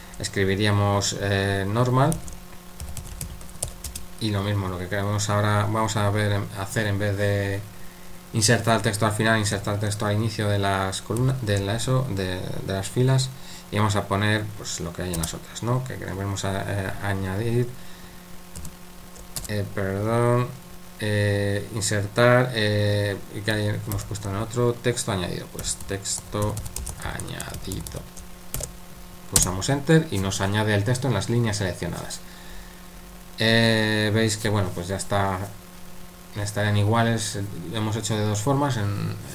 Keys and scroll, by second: 2.1-4.2 typing, 11.2 i, 18.6 shift+', 25.3-28.5 typing, 29.4 Return.